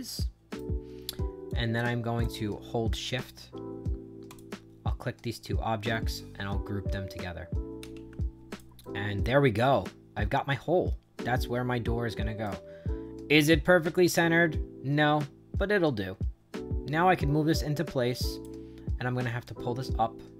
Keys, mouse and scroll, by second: 1.4 click, 2.1 click, 4.2 shift+click, 7.7 ctrl+g, 8.4 click, 8.7-12.3 right drag, 12.7-13.9 middle drag, 13.9-18.3 drag, 19.4-20.3 drag.